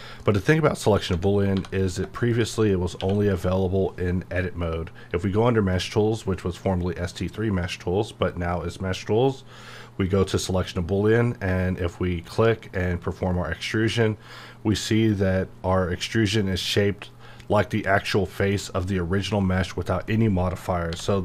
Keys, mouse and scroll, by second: 0.2 middle click, 1.1 Tab, 1.8 click, 2.7 middle click, 3.0 q, 10.1-12.6 drag, 15.1 click, 18.5-20.9 middle drag, 20.9 h.